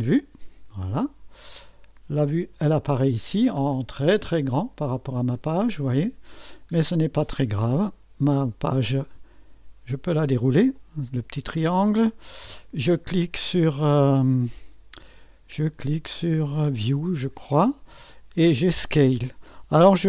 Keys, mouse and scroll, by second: 0.0-1.2 drag, 2.3 click, 3.0 middle click, 3.1-8.3 scroll down 2, 8.3-8.6 scroll down 1, 10.7 click, 11.6-14.7 scroll down 2, 16.9-18.0 drag.